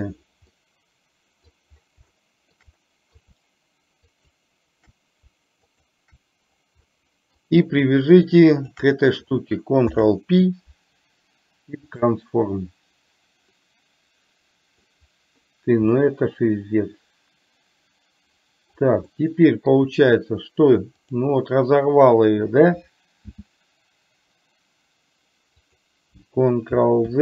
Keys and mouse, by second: 0.7-1.7 middle drag, 2.2-2.7 shift+middle drag, 2.8 middle click, 4.2 shift+click, 5.7 shift+click, 7.0-7.4 middle drag, 8.7 shift+click, 9.9 ctrl+p, 13.8-15.0 middle drag, 16.0-18.8 middle drag, 19.2 middle click, 21.0 click, 23.4 s.